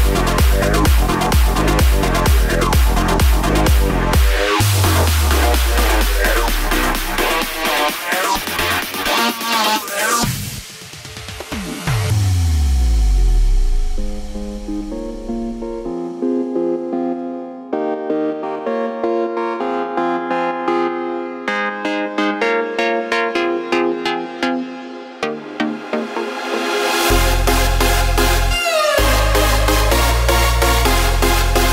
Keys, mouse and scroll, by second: 4.2 click, 6.6 shift+click, 7.5 shift+click, 8.5 shift+click, 9.6 KP_7, 10.1-11.2 scroll down 3, 11.4 shift+click, 12.3 r, 13.4 g, 15.6 KP_0, 16.9 click, 17.2 z, 20.6-21.0 scroll down 2, 21.0-21.4 shift+middle drag, 21.4 scroll up 2, 23.0 click, 24.5 click, 25.9 scroll down 3, 26.1-26.6 middle drag, 26.6-26.9 scroll down 1, 26.9-27.8 middle drag, 27.8 click, 28.5 KP_0, 29.2-29.6 scroll up 3, 29.6 click.